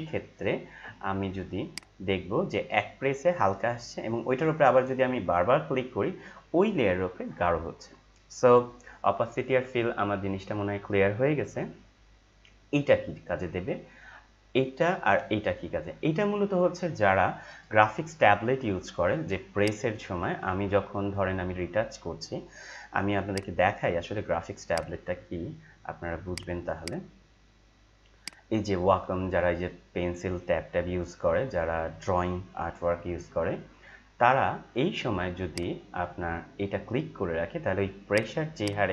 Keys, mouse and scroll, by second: 23.3 click, 24.9 click, 26.9 click, 29.7 scroll up 1, 31.6 scroll up 1, 35.4 click, 38.1-38.9 drag.